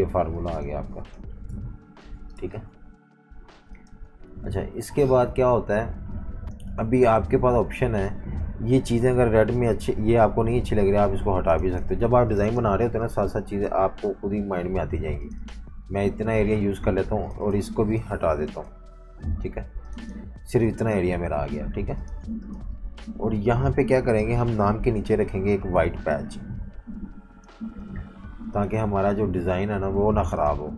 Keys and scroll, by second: 1.5 super+-, 1.7 super+-, 2.3-5.0 typing, 13.6 Delete, 19.4 Delete, 21.5-22.2 typing, 24.3 m, 28.9 v.